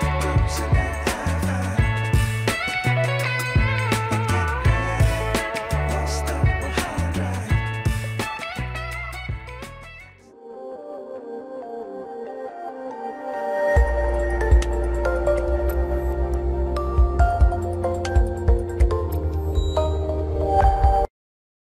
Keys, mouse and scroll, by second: 0.3-0.7 alt+scroll down 1, 1.2 alt+scroll up 1, 2.7 middle click.